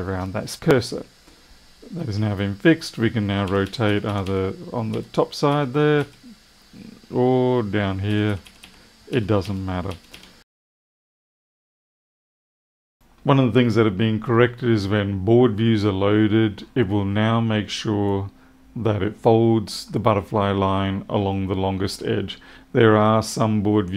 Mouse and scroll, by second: 23.1 click.